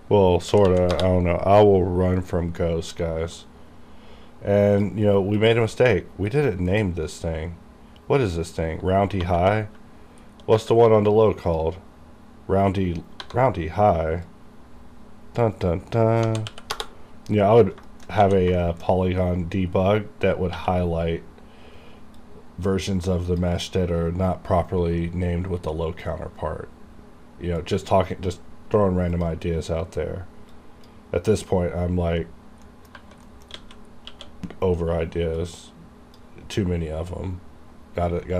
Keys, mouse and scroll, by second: 0.6 h, 0.9 Return, 3.4-5.4 drag, 6.6 KP_Decimal, 9.3 2, 10.3-10.6 scroll down 1, 10.6 3, 11.5 click, 12.8-13.1 scroll up 1, 13.2 F2, 14.3-16.3 drag, 16.8 Return, 17.6-18.2 scroll down 3, 17.9 shift+middle click, 18.3 a, 18.6 shift+middle click, 18.9 shift+scroll down 1, 19.3-20.6 scroll up 1, 20.6 q, 22.2-27.7 drag, 27.7-29.2 drag, 29.2-32.2 drag, 32.2 scroll up 1, 32.7 middle click, 33.0 2, 33.3 middle click, 33.6 a, 34.0 scroll down 1, 34.2 q, 35.4-38.3 drag.